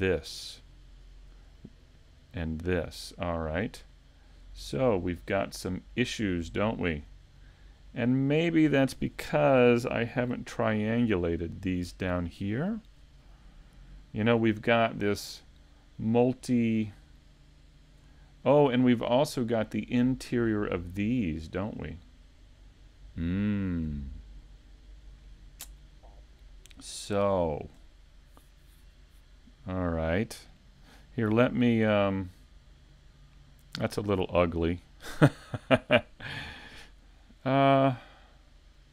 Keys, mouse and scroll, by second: 5.5 scroll up 3, 6.0 middle click, 6.9 scroll down 2, 7.0 scroll up 2, 7.4 scroll down 1, 16.9-17.5 scroll up 4, 17.4 shift+middle click, 21.6 middle click, 27.4 shift+middle click.